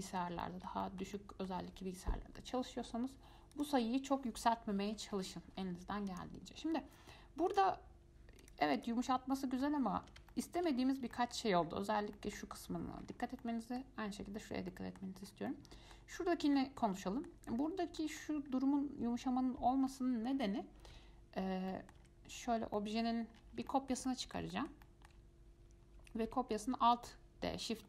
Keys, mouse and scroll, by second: 0.2-3.7 shift+middle drag, 3.7-6.4 drag, 7.7-8.7 drag, 9.0 click, 9.3-11.0 middle drag, 11.0-11.3 scroll up 1, 11.3-11.8 shift+middle drag, 11.8-12.2 scroll up 4, 12.2 scroll down 1, 12.3 middle click, 13.2-13.6 scroll down 6, 13.6-15.4 middle drag, 15.4 scroll down 1, 15.4 scroll up 3, 15.7-16.4 middle drag, 16.4-16.8 scroll up 4, 16.8-17.7 shift+middle drag, 17.7-18.2 scroll up 4, 18.2-18.7 shift+middle drag, 18.7 scroll up 2, 20.1-21.1 middle drag, 21.1 Tab, 21.6-23.0 scroll down 5, 21.9 middle click, 22.2 Tab, 23.0 shift+middle click, 23.2-23.8 scroll down 9, 23.9-26.5 shift+middle drag, 26.5 alt+d.